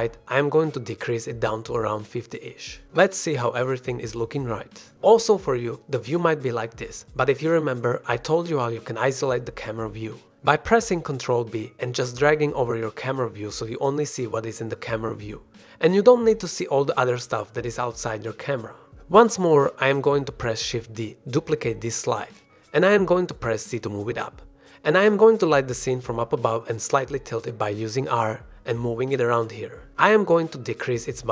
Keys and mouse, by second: 2.8 click, 2.8 middle click, 3.5-4.9 middle drag, 12.4 ctrl+b, 18.9 g, 18.9 click, 20.0 g, 20.0 z, 20.4 click, 20.8 r, 20.9 z, 22.0 click, 22.2 g, 22.4 shift+z, 23.5 r, 26.0 click, 26.2-26.7 middle drag, 26.9-29.9 typing, 27.4 click.